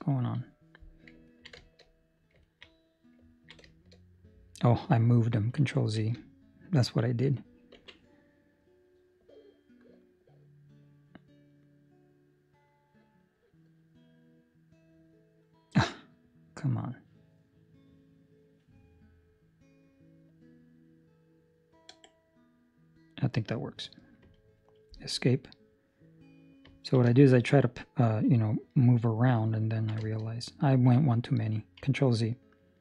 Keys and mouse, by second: 0.1 Escape, 0.5 middle click, 1.2 ctrl+middle click, 1.5 shift+middle click, 1.8 middle click, 2.4 ctrl+middle click, 2.6 middle click, 3.3 ctrl+middle click, 3.6 shift+middle click, 3.9 middle click, 5.9 ctrl+z, 7.7 ctrl+r, 25.5 middle click, 26.7 ctrl+middle click, 27.2 shift+middle click, 29.6 ctrl+middle click, 29.9 shift+middle click, 30.2 middle click, 30.7 ctrl+middle click, 30.9 middle click.